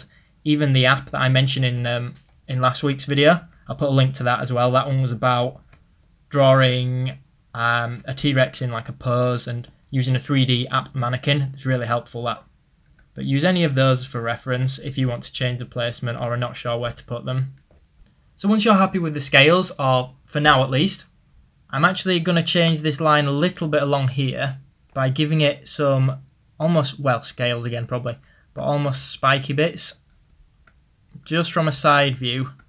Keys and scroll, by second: 25.4 ctrl+z.